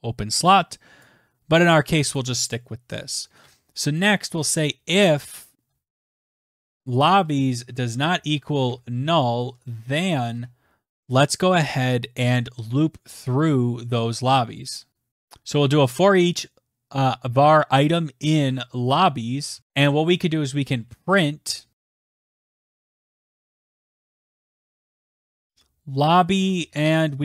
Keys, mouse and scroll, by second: 0.8 Return, 1.4-8.0 typing, 12.4-14.2 typing, 14.3 Down, 14.6 Tab, 15.1 Tab, 15.5-17.4 typing, 18.8 click, 19.5-23.7 typing, 23.9 Right, 24.2 Right, 24.5 Left, 25.2-27.2 typing.